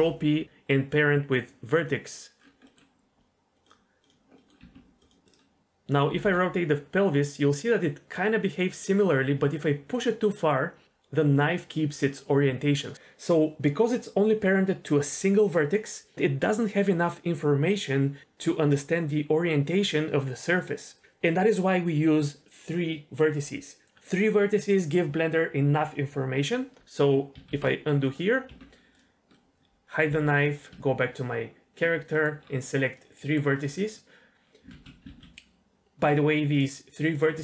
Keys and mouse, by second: 2.6 middle click, 4.0 click, 4.4 middle click, 4.6 Tab, 5.2 r, 5.6 r, 6.1 r, 6.2 r, 27.6 alt+r, 28.0 middle click, 28.5 Tab, 28.9 click, 29.3 middle drag, 30.1 h, 30.4 click, 30.7 Tab, 32.1 middle click, 32.9 click, 33.2 middle click, 34.7 ctrl+z, 35.1 ctrl+z, 37.1 shift+click.